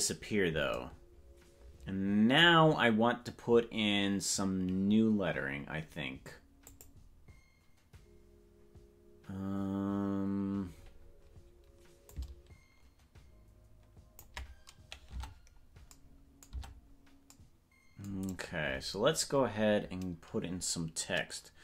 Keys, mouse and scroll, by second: 6.7 click, 12.1-14.2 ctrl+drag, 15.1 Tab, 16.7 Tab.